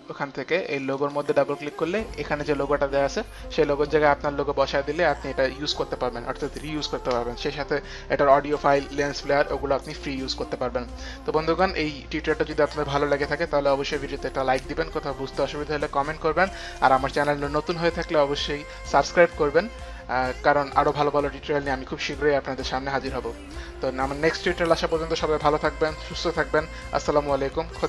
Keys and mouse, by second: 0.9 click.